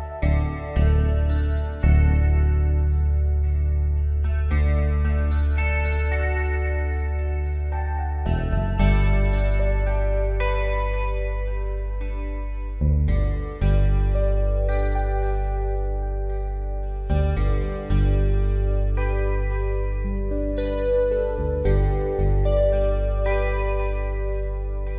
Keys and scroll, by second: 1.5 ctrl+t, 5.0 alt+shift+Return, 6.5 F3, 14.1 F3, 18.9 space.